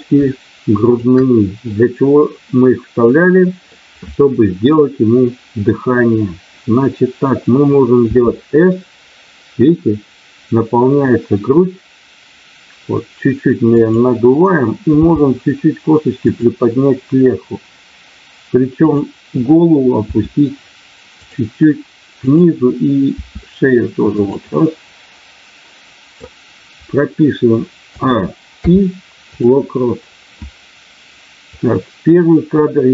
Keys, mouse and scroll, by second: 0.7 shift+click, 1.7-3.7 middle drag, 13.7 click, 14.9 g, 16.2 click, 18.8 click, 20.1 r, 21.1 click, 22.2 click, 23.1 r, 24.4-26.3 middle drag, 28.6 i, 31.5-32.9 drag.